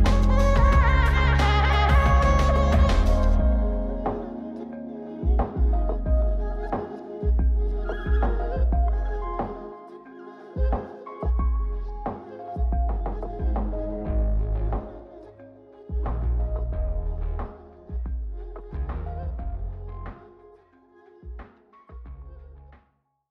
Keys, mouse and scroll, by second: 2.6 click, 3.9 click, 5.4 click, 7.2 click, 8.2 click, 9.6 click, 12.9 click, 13.6 click, 15.6 click, 16.5 click, 18.0 click, 20.5 middle click.